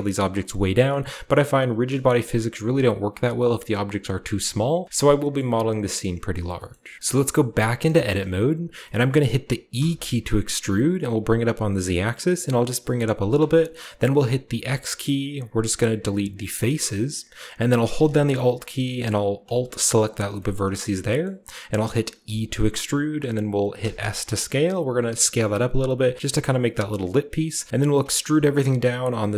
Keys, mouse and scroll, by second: 0.7 click, 2.1-3.9 shift+scroll up 2, 2.2-3.9 shift+middle drag, 4.8-6.6 scroll down 2, 5.3 middle click, 5.9-6.5 middle drag, 6.6 shift+middle click, 6.7-8.7 shift+scroll up 2, 7.0 ctrl+b, 7.5 Tab, 8.7-9.7 shift+scroll up 1, 9.7 e, 13.1 click, 13.4-14.0 scroll up 2, 13.6 click, 14.0 scroll down 2, 14.5 x, 15.2-15.9 scroll up 1, 15.9-16.5 scroll up 1, 16.5 click, 19.4 right click, 20.3 middle click, 20.8-22.2 scroll down 1, 21.0-23.7 middle drag, 22.2 scroll down 1, 22.2 e, 23.7 s, 27.3 click, 27.9 e, 28.3 z, 29.2 click.